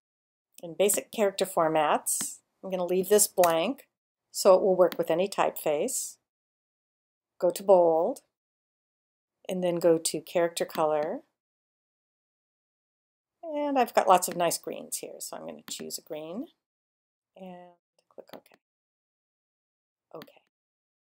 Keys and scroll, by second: 3.4 BackSpace.